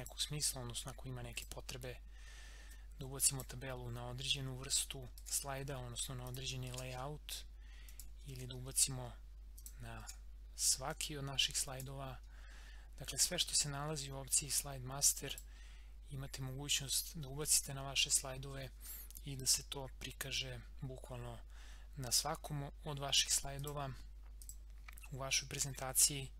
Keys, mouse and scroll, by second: 5.2 ctrl+x, 5.5 scroll down 1, 6.3 click, 6.7 ctrl+v, 7.9 click, 8.3 ctrl+x, 8.6 scroll up 1, 9.5 click, 10.0 ctrl+v, 10.9-14.0 drag, 15.2 click, 23.5 click, 25.6 scroll down 1.